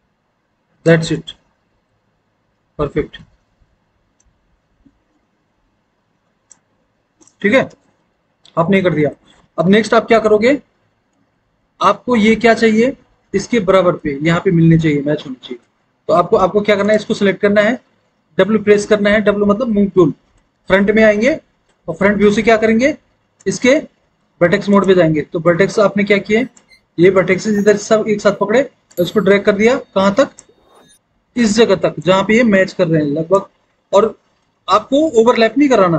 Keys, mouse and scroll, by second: 9.2 alt+w, 9.6 alt+w, 18.6 w, 20.4 alt+w, 21.1 alt+w.